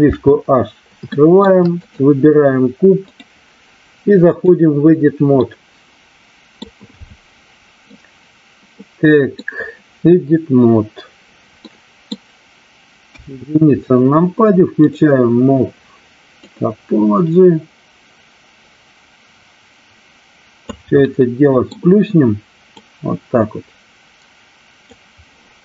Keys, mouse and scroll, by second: 1.2 shift+middle drag, 1.6 click, 3.2-4.4 drag, 5.4-6.6 middle drag, 7.9-9.4 middle drag, 11.6 middle click, 13.0 KP_1, 16.4-20.5 drag, 21.0 middle click, 22.8-24.9 drag.